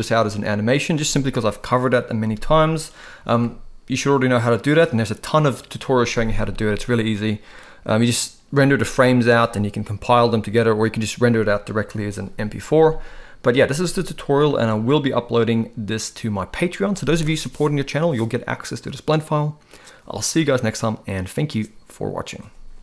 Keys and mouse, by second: 14.6 ctrl+s.